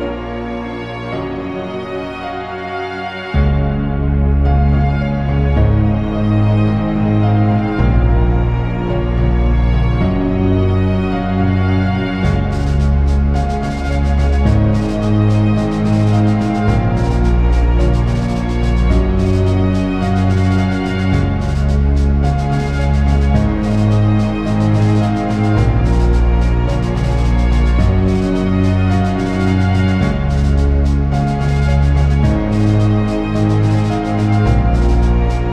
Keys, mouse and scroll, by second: 0.2 scroll down 1, 1.6 shift+middle click, 1.7-2.0 scroll up 1, 2.0 scroll down 1, 4.2 click, 4.9 ], 5.2 click, 7.3 click, 7.9 ctrl+z, 8.0 click, 8.7 ctrl+z, 8.9 click, 10.3 click, 12.3 click, 13.2-13.9 click, 13.6 click, 13.7 click, 13.7 click, 16.9 click, 17.7 click, 18.2 click, 18.6 click, 19.1 middle click, 19.2 scroll down 1, 19.3 shift+middle click, 19.6 click, 19.9 click, 20.9 ctrl+click, 21.0 ctrl+click, 21.9 ctrl+click, 21.9 middle click, 22.0 scroll up 1, 22.2 click, 22.8 shift+middle click, 23.1 click, 23.5 click, 24.1 click, 24.6 click, 25.3 click, 26.0 ctrl+click, 27.0 click, 27.3 ctrl+click, 27.6 click, 28.8 shift+middle click, 29.0 scroll up 1, 29.2 click, 30.5 shift+middle click, 31.3 scroll up 1, 31.8 click, 32.6 click, 32.9 scroll down 2, 33.0 middle click, 33.3 click, 34.0 click, 34.3 scroll up 1, 34.4 middle click, 34.8 click.